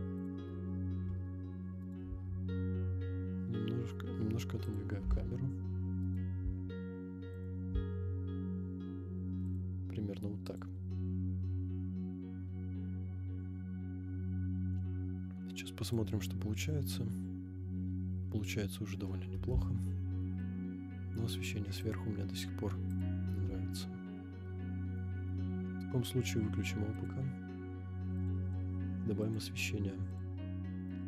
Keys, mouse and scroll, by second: 1.0 g, 1.1 y, 1.8 right click, 2.0 g, 2.1 z, 4.8 click, 5.0 g, 6.0 click, 6.0 right click, 6.0 x, 6.4 g, 7.5 click, 7.7 g, 7.8 y, 9.6 click, 12.8 click, 15.8 click, 16.9 scroll up 3, 18.4 scroll down 2, 19.8-20.5 shift+middle drag, 20.7 scroll up 2, 21.8 click, 22.9 click, 23.6-24.0 scroll down 2, 24.4 middle click, 24.4-24.9 scroll down 1, 25.0 scroll down 2, 25.6 middle drag, 26.9 click, 27.4-27.7 scroll up 2, 28.2-30.3 drag, 30.4 scroll up 1, 30.6-31.0 middle drag.